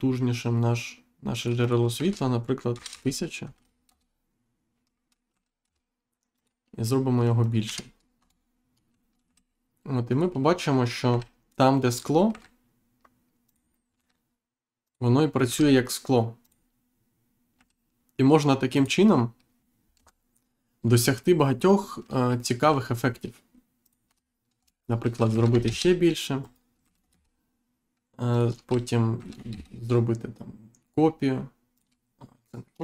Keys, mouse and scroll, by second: 0.5 click, 2.7 0, 3.8 Return, 6.3 click, 7.4 click, 7.6 1, 8.1 Return, 9.2 g, 10.0 click, 11.8 click, 12.2 g, 13.4 click, 14.8 click, 16.4 click, 18.7 click, 19.9 Insert, 23.8 click, 24.0 2, 24.5 Return, 25.6 shift+z, 26.4 right click, 26.8 g, 27.0 shift+z, 28.3 shift+click, 28.5-29.0 scroll down 1, 29.4 shift+z, 31.7 shift+click, 32.1 scroll down 1, 32.5 middle click.